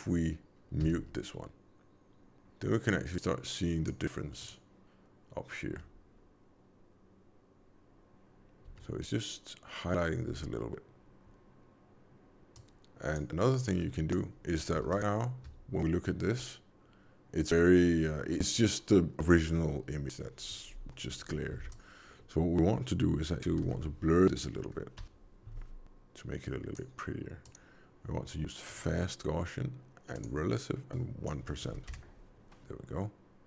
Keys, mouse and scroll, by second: 0.8 m, 3.0 click, 4.3 click, 5.7 m, 8.6 m, 12.5 click, 13.6 click, 14.8 ctrl+shift+click, 21.4 shift+a, 27.4 click, 30.1 click.